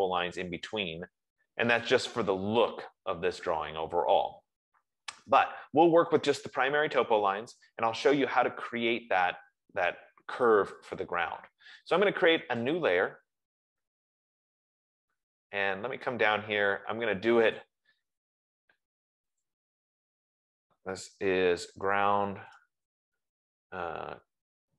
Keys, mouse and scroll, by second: 8.3 Escape, 13.0 click, 16.4-17.0 scroll, 18.0 click, 19.7 click, 22.1-23.8 typing.